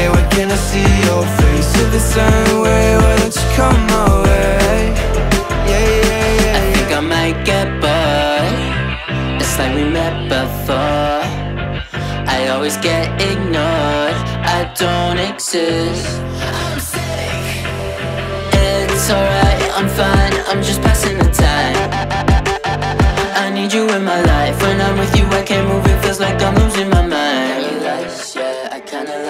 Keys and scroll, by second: 1.6 v, 3.2 ctrl+c, 4.2 ctrl+v, 6.0 Delete, 8.4 Up, 10.8 Down, 12.4 Tab, 14.4 Tab, 15.2 Tab, 15.4 Tab, 16.7 Tab, 19.4 Tab, 20.5 Tab, 23.4 Tab, 23.6 Tab, 24.8 Tab.